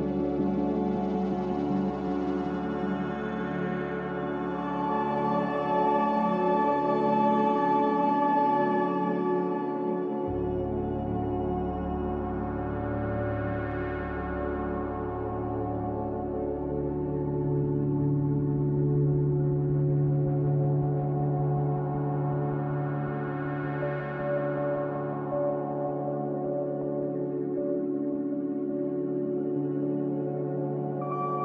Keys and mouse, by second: 1.6 middle click, 4.6 shift+middle click, 6.2 click, 12.5 ctrl+s, 24.8 click, 25.8 click, 26.9 Tab, 27.4 Tab, 27.8 click, 29.0 F4, 31.3 click.